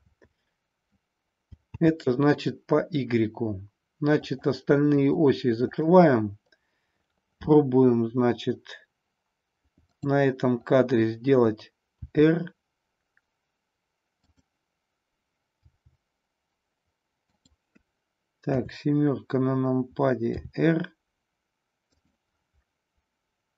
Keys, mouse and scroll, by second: 0.0 ctrl+z, 1.8 ctrl+z, 4.3 click, 5.0 click, 5.6 click, 9.9 click, 12.0 r, 14.3 click, 15.5 g, 17.4 click, 18.4 KP_7, 20.3 r.